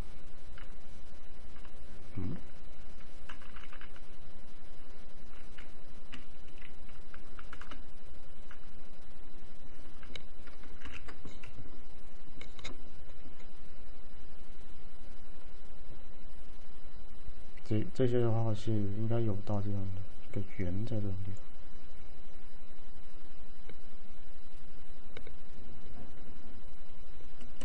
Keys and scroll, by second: 0.7-2.1 typing, 3.3 [, 7.4-8.5 typing, 10.9 ctrl+j.